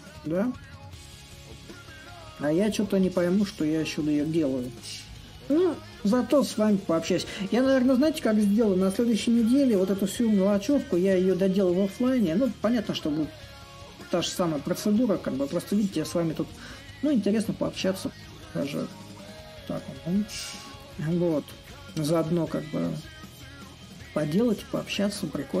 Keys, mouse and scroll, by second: 0.0 click, 2.4-5.0 drag, 6.5-11.5 middle drag, 13.9-25.6 drag.